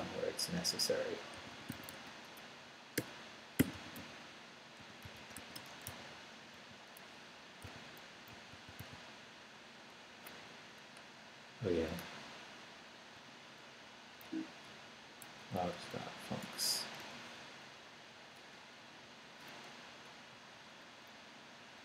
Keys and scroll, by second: 1.1-6.4 typing, 8.1 Left, 8.3 Right, 8.5 n, 13.1 /, 13.7 Up, 14.2 Down, 14.6 Up, 15.2 Left, 16.4 BackSpace, 17.0 Return, 19.0 Right, 20.3 Right, 21.3 Down.